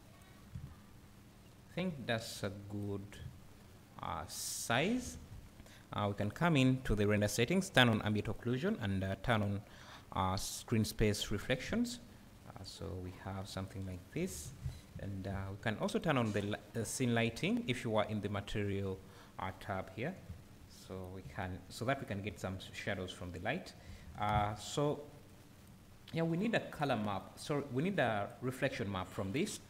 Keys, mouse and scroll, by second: 0.5 `, 1.8 scroll up 1, 3.2 `, 10.7 click, 11.6 `, 14.6 scroll down 1, 14.9 `, 15.9-26.4 drag, 20.2 `, 21.2 `, 21.9 scroll up 1, 22.3 `, 27.2 click, 28.0 click.